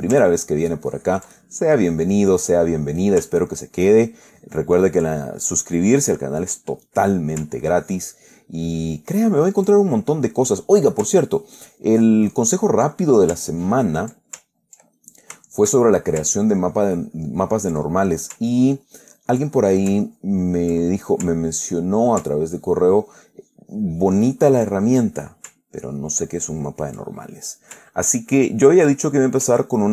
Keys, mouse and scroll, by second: 0.1 ctrl+middle click, 0.8 ctrl+click, 1.7-2.3 ctrl+middle drag, 2.5-3.0 ctrl+middle drag, 3.5 ctrl+middle click, 3.8-5.4 ctrl+drag, 5.4 ctrl+middle click, 7.2 click, 8.1-10.5 ctrl+drag, 10.8 ctrl+click, 11.6-13.2 ctrl+drag, 13.3-13.7 ctrl+middle drag, 13.8 ctrl+click, 14.7 ctrl+click, 15.1-15.7 ctrl+middle drag, 15.8-16.5 ctrl+shift+middle drag, 16.9 ctrl+click, 17.4 ctrl+click, 18.1-18.6 ctrl+middle drag, 18.8 ctrl+click, 19.8-20.2 ctrl+middle drag, 20.4 ctrl+click, 21.1-21.6 ctrl+middle drag, 22.0-22.5 ctrl+middle drag, 22.9-25.6 ctrl+drag, 26.1-27.4 ctrl+drag, 27.4-27.9 ctrl+middle drag, 28.3 ctrl+click, 29.2-29.8 ctrl+middle drag.